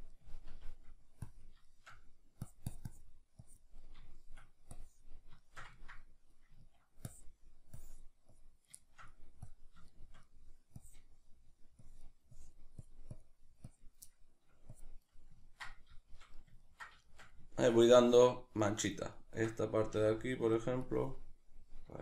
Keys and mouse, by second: 1.2 click, 1.6 shift+middle click, 2.4-3.8 drag, 3.8 middle click, 4.7 click, 5.4-7.1 shift+middle drag, 7.1-8.8 drag, 8.8 shift+middle click, 9.5 click, 9.9 shift+middle click, 10.8-14.1 drag, 14.1 middle click, 14.7 click, 15.1-20.6 middle drag, 19.9 f, 20.6 click, 21.9-22.0 shift+middle drag.